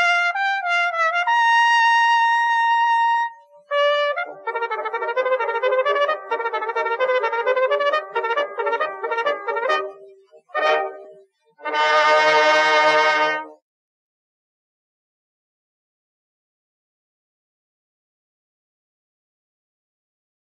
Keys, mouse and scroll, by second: 0.3 a, 0.7 z, 0.9 c, 1.8 click, 2.2 click, 3.2 z, 4.3 ctrl+r, 5.8 ctrl+r, 7.8 middle click, 8.0 middle click, 9.2 a, 9.2 z, 9.3 c, 11.3 middle click, 11.6-14.8 drag, 14.8 click, 15.2 a, 15.3 a, 16.0-17.0 drag, 18.5 z, 18.6 a, 19.4 middle click.